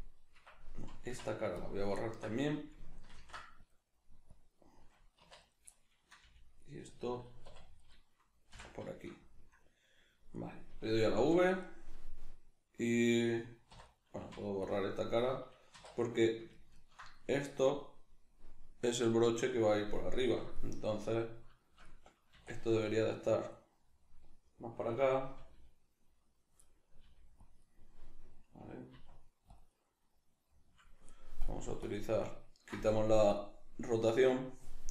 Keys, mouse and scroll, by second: 0.4 Escape, 0.8 middle click, 0.8 right click, 1.0 x, 2.0-4.4 ctrl+middle drag, 3.1 ctrl+r, 4.4 click, 5.2 1, 5.4 right click, 5.7-7.0 middle drag, 6.3 g, 7.0 click, 7.5 2, 7.8 right click, 8.5 f, 8.9-10.3 shift+middle drag, 10.3 right click, 11.2 v, 11.7 right click, 13.7 3, 13.9 right click, 14.2 x, 15.7 2, 16.0 right click, 16.5 ctrl+right click, 16.7 ctrl+right click, 17.2-22.3 middle drag, 22.3 e, 23.4 click, 23.5-25.4 middle drag, 25.4 g, 25.8 click, 26.6 middle click, 27.1 g, 27.5 click, 27.7-28.9 middle drag, 28.9 e, 29.6-34.9 middle drag, 29.6 click, 31.4 click.